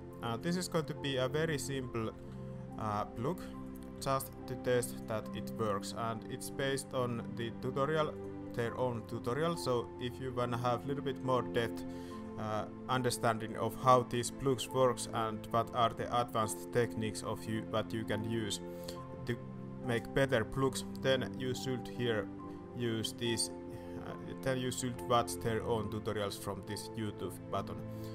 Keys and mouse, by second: 1.4 alt+a, 2.3 alt+a, 2.7 click, 3.7 alt+click, 3.9 s, 5.2 alt+a, 6.5 click.